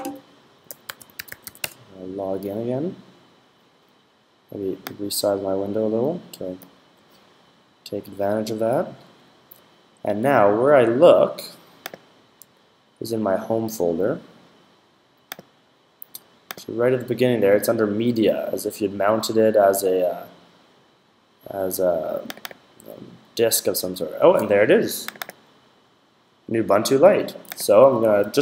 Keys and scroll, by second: 0.3-1.8 typing.